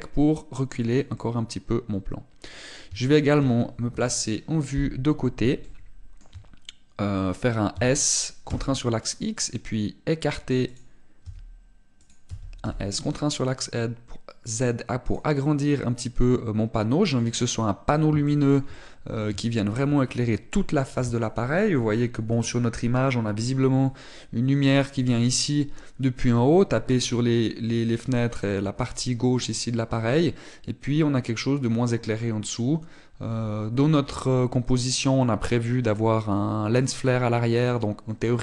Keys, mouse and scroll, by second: 1.7 click, 1.9 middle click, 3.7 shift+middle click, 4.6 KP_1, 6.3 shift+middle click, 8.5 s, 11.7 click, 12.1 s, 12.9 click, 13.0 s, 16.1 click, 16.1 middle click, 18.2 middle click, 18.9 shift+middle click, 19.4 middle click, 20.1 shift+middle click.